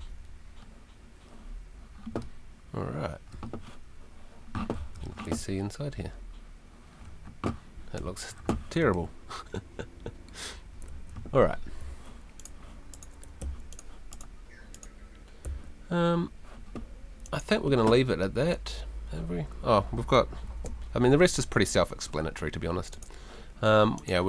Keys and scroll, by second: 4.7 d, 5.3 s, 7.7-9.3 typing, 10.9 Escape, 13.4 Escape, 15.4 Escape, 19.6 Escape, 20.5 F2.